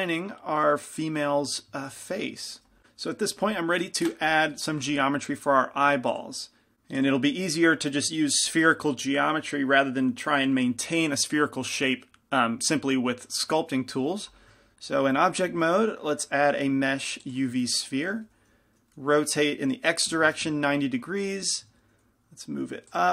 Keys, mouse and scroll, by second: 7.7-17.5 middle drag, 17.5 shift+a, 17.8-20.2 middle drag, 18.9 r, 21.8 g.